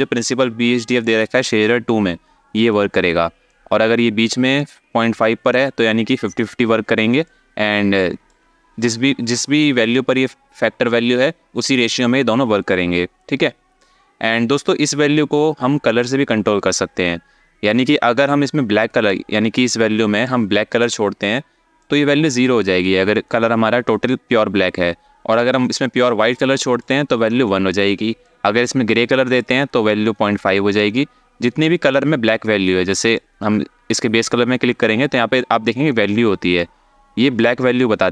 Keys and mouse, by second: 3.2-4.3 ctrl+drag, 6.9-8.0 drag, 13.4-14.3 drag, 18.7-20.5 drag, 21.6-26.5 drag, 28.0-29.1 drag, 29.6 ctrl+click, 31.4 alt+shift+middle click, 32.7 click.